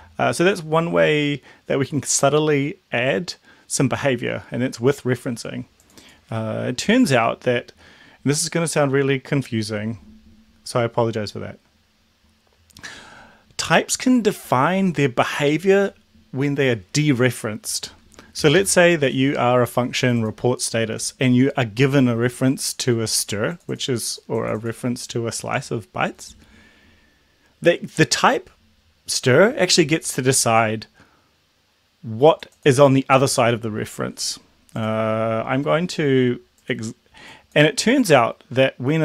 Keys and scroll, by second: 0.0 ctrl+l, 18.5 Left, 18.7 Left.